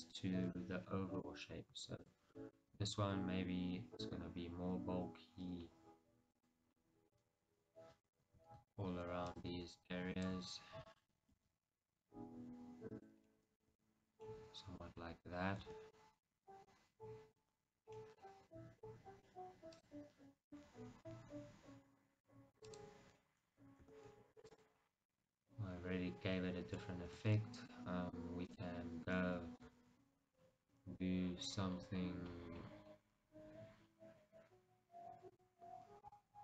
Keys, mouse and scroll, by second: 1.1-1.4 scroll up 2, 2.2 alt+click, 2.5 middle click, 2.9 s, 6.6 click, 7.0 middle click, 8.2-11.5 alt+drag, 11.5 s, 13.3 click, 13.5-19.9 middle drag, 13.9 Tab, 14.2 scroll down 2, 15.1-15.7 scroll up 2, 15.7 Tab, 16.7 scroll up 2, 18.5-19.0 scroll up 2, 19.9-21.2 drag, 21.2-22.7 middle drag, 22.7 click, 24.0 Tab, 24.2 scroll down 1, 24.6 click, 25.0 scroll down 1, 25.3-28.6 middle drag, 27.3 Tab, 28.6 click, 29.3-36.2 middle drag, 29.9 g, 36.2 click.